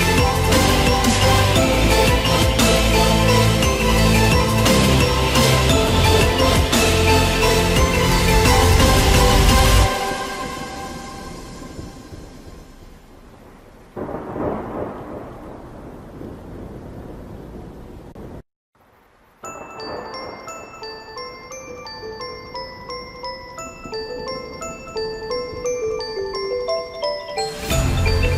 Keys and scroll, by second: 8.2 ctrl+alt+z.